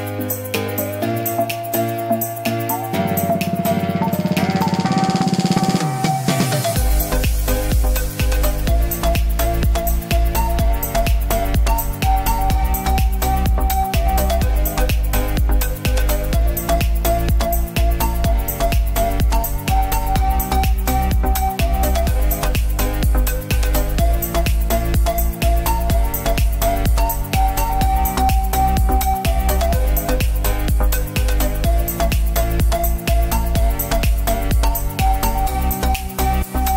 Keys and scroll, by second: 2.6 space, 4.7 ctrl+z, 6.5 ctrl+z, 7.6 space, 8.4 ctrl+z, 9.0 ctrl+z, 10.2 ctrl+d, 12.5 ctrl+alt+z, 14.3 ctrl+shift+z, 16.9 b, 19.9 b, 20.2 x, 21.7 ctrl+z, 27.1 ctrl+s, 31.6 ctrl+alt+z, 32.4 ctrl+alt+z, 32.9 ctrl+d, 33.4 space, 36.5 space.